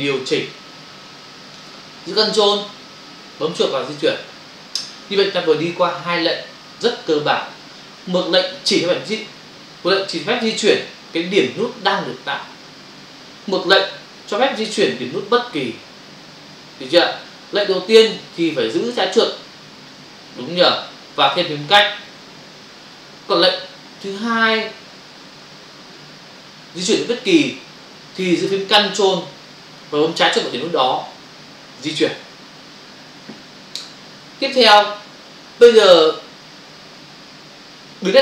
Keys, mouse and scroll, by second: 3.7 ctrl+click.